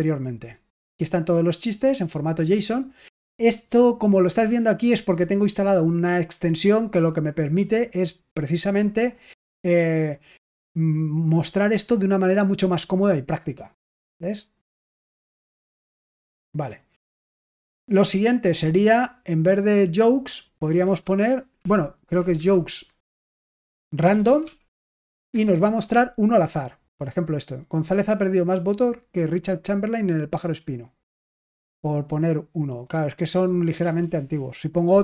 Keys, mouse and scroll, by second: 1.5 click, 14.3 click, 15.8 click, 19.0 click, 20.1 click, 20.8 BackSpace, 21.5 s, 22.3 /, 23.7-25.5 typing, 32.0 click, 32.9 click, 33.7 Return.